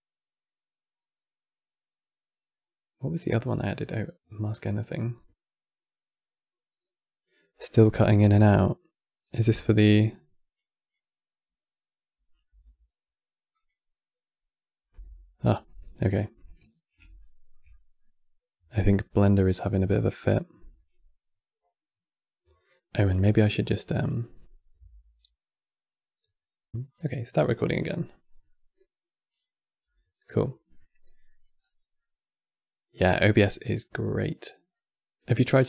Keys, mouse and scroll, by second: 18.4-24.2 middle drag, 30.5-31.3 middle drag, 31.3-31.7 scroll down 4, 31.7-35.0 middle drag, 35.0 click.